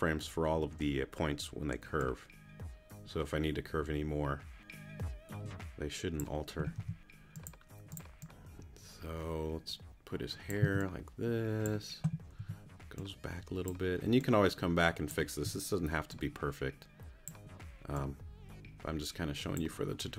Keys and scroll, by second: 6.7 t, 10.6 c, 12.4 t, 15.4 t.